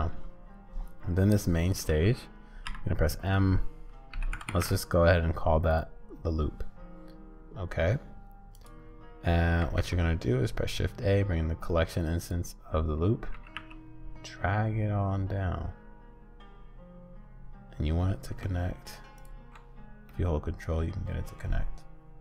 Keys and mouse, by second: 2.6 m, 4.4 o, 9.6 shift+a, 13.3 g, 20.2-21.4 middle drag.